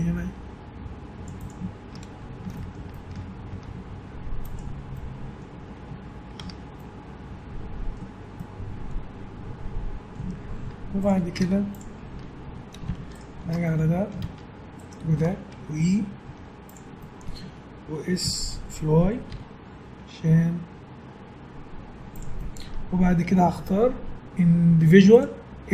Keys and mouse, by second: 1.9 Tab, 3.5 Tab, 4.2 middle click, 4.9-11.0 middle drag, 6.4 Tab, 10.6 Tab, 11.0 right click, 11.4 Tab, 11.8 middle click, 12.4 right click, 12.4 a, 12.9 middle click, 13.1 right click, 13.7 middle click, 13.8 right click, 16.2 e, 18.2 s, 22.5-24.2 middle drag, 25.1-25.7 drag.